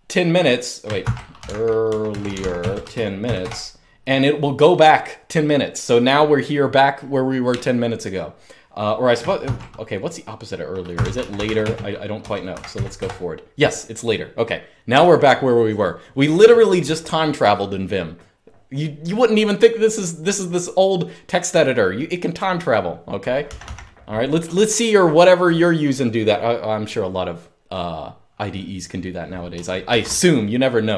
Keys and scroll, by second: 0.7-3.1 typing, 4.1-4.9 typing, 9.1 typing, 10.4-12.9 typing, 23.1 typing, 29.6 ctrl+d.